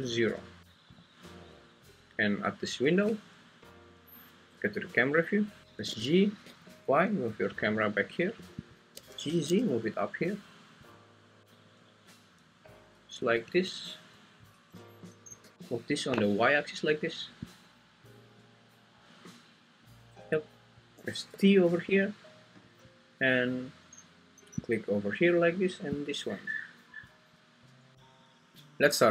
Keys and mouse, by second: 5.8 g, 6.8 y, 9.1 g, 9.3 z, 11.0 click, 13.4 `, 14.5 `, 15.4 g, 15.6 Escape, 15.6 y, 21.3 t.